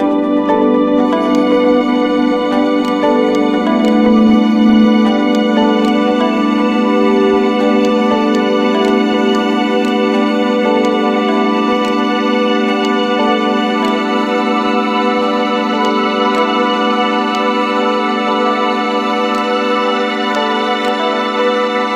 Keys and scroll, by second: 5.7-6.5 typing, 7.5 m, 10.2 typing, 16.3-17.1 typing.